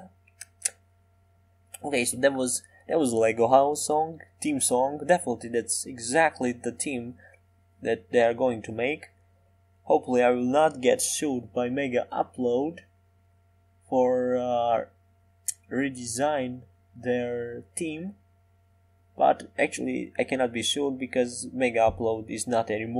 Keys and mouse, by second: 2.3-5.9 drag, 2.7 s, 7.6-9.2 middle drag, 10.1-11.9 drag, 11.9-13.1 middle drag, 14.2-16.0 middle drag, 16.6-17.9 middle drag, 17.9 middle click, 19.1 middle click, 20.9 Tab.